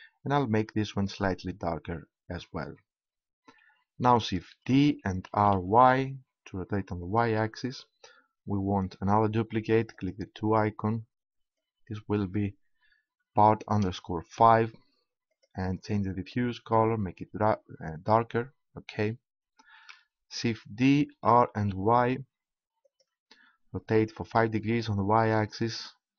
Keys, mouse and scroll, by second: 4.5 shift+d, 7.2-9.0 drag, 10.0-12.2 drag, 15.3-17.0 drag, 20.3 shift+d, 23.5-24.8 drag, 25.7-26.1 drag.